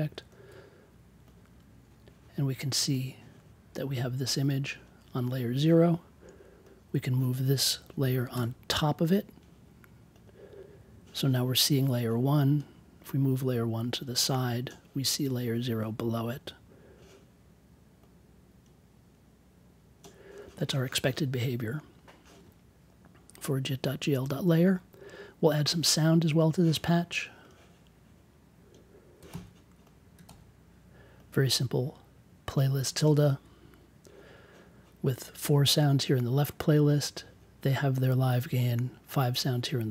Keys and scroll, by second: 8.3 1, 29.2 super+c, 30.2 super+v.